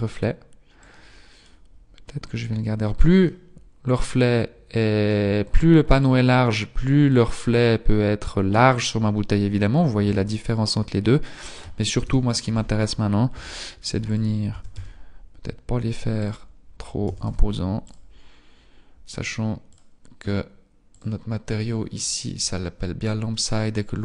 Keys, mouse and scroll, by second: 0.6 click, 3.3 middle click, 5.9 click, 11.9 KP_7, 13.3 g, 14.5 s, 16.9 s, 22.9 click, 22.9-24.0 scroll up 9.